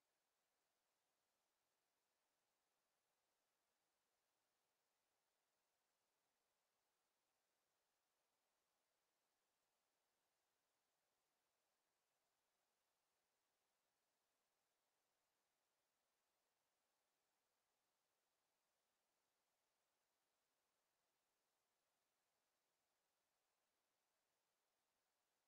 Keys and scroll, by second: 18.2 w, 21.9 a, 22.3 w.